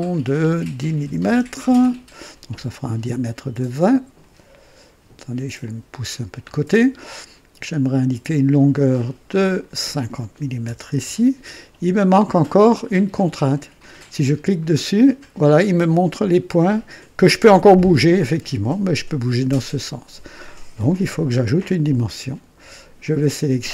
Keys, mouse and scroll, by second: 1.0 KP_1, 1.2 KP_0, 1.3 KP_0, 1.6 KP_Enter, 4.1-5.0 drag, 5.6-6.5 drag, 7.9 click, 9.2 click, 10.4 KP_5, 10.6 KP_0, 10.8 Return, 12.0 typing, 14.5 click, 17.9-20.8 drag, 21.1 click.